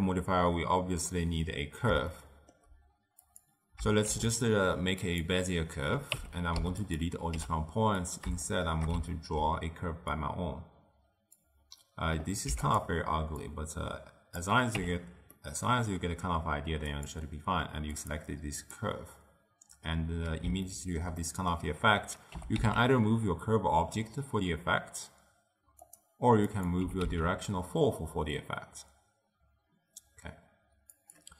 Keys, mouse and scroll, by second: 2.1-3.2 shift+middle drag, 3.2 click, 4.0 shift+a, 6.1 Tab, 6.5 x, 7.3 t, 7.9 click, 8.4-10.1 shift+middle drag, 10.1-12.4 drag, 12.4 x, 13.4-14.7 drag, 14.7 Tab, 15.3-16.8 middle drag, 16.8 click, 17.9 click, 20.6-22.3 ctrl+middle drag, 22.3 g, 26.4 click, 26.8 g.